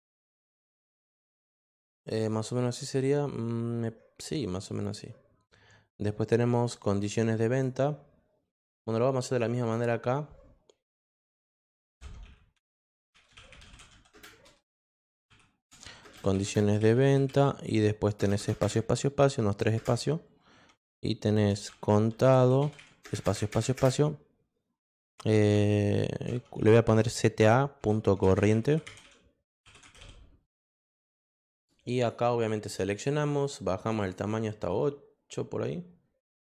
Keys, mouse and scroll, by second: 0.5 click, 1.0 click, 7.0 click, 7.5 click, 9.6 click, 11.6-18.6 typing, 21.2-23.5 typing, 26.1 c, 26.8 a, 28.0-30.5 typing, 31.3 click, 31.9 click, 33.8 click, 34.0 click, 34.2 click.